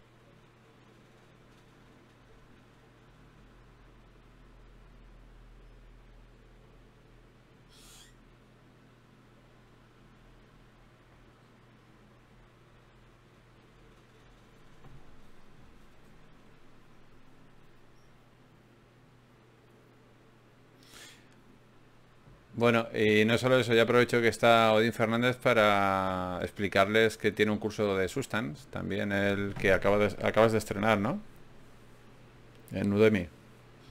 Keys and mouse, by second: 0.6 g, 1.5 click, 2.4 ctrl+r, 5.3 g, 5.7 click, 6.9 g, 7.9 g, 8.3 click, 8.7 g, 9.5 click, 10.3 g, 11.1 click, 11.9 g, 15.9 g, 17.1 g, 18.3 g, 21.1 ctrl+r, 22.7-25.9 drag, 24.7 alt+m, 26.5-27.8 drag, 27.8 g, 29.0 click, 30.6 alt+m, 30.6-31.6 drag, 32.2 click, 32.8 g.